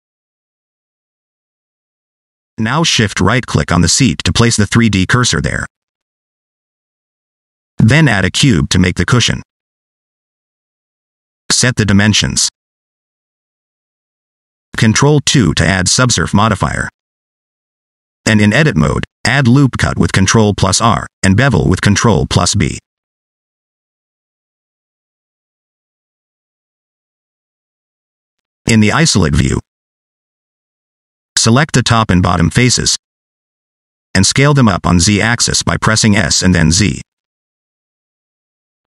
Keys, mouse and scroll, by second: 4.3 middle click, 4.7 shift+middle click, 5.0 scroll up 2, 5.2 middle click, 5.9 shift+right click, 7.1 shift+a, 9.9-10.6 scroll down 3, 10.6 click, 11.5 click, 12.6 click, 14.3 scroll up 2, 14.4 middle click, 15.9 ctrl+2, 16.3 Tab, 18.1 ctrl+r, 21.9 ctrl+b, 25.0 ctrl+r, 25.9 middle click, 26.3 scroll up 1, 26.7 ctrl+b, 29.8 /, 31.2 3, 32.5 click, 33.0 scroll down 1, 33.1 middle click, 34.2 shift+click, 35.1 scroll down 2, 35.2 middle click, 36.5 s.